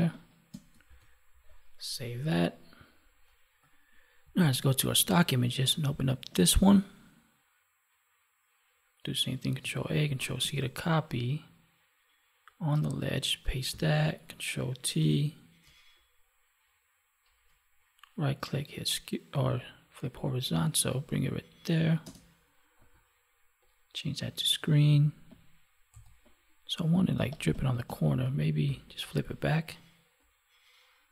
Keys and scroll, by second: 0.8 ctrl+s, 3.7 F9, 4.4 alt+Tab, 9.5 ctrl+a, 10.3 ctrl+w, 13.7 ctrl+v, 15.0 ctrl+t, 27.1 space.